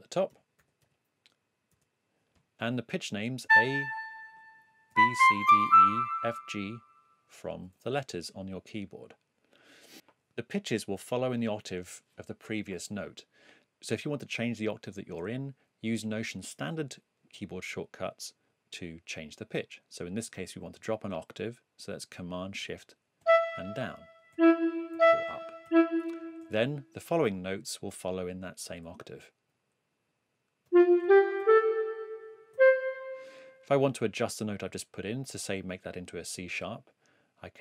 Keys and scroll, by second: 0.0-1.7 typing, 3.4 a, 4.6-6.1 typing, 9.9 7, 23.2 shift+super+Down, 24.9 shift+super+Up, 25.6 shift+super+Down, 30.4-32.5 typing.